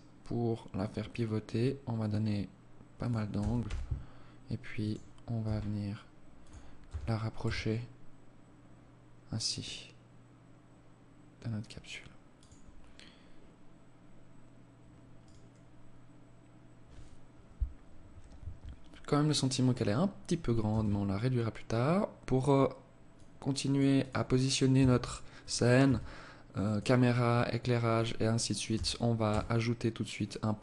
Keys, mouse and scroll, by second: 2.7 g, 4.8 g, 6.1 g, 14.5 right click, 20.0 shift+a, 24.1 s, 25.1 s, 28.1 g.